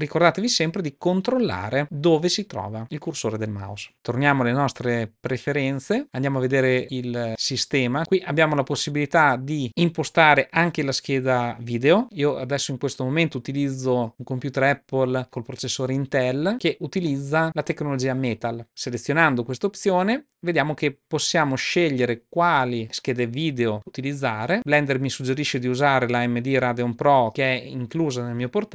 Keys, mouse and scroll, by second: 3.9 super+,.